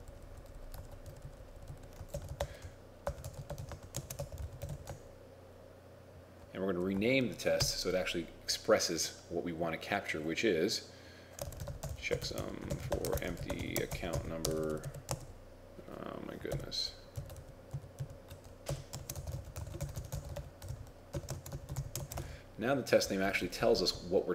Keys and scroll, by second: 2.2 shift+f, 3.2 shift+e, 4.0 shift+a, 7.7 ctrl+shift+Left, 11.5 shift+c, 12.7 shift+f, 13.2 shift+e, 15.2 shift+a, 17.4 ctrl+Right, 17.9 ctrl+Right, 18.1 ctrl+Right, 19.0-22.0 typing.